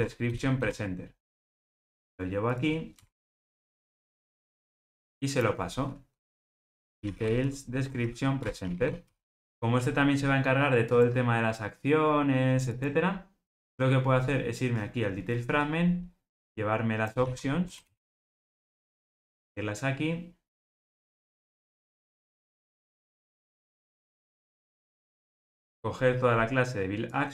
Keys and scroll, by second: 8.4 Return, 17.2 super+x, 23.8 super+v.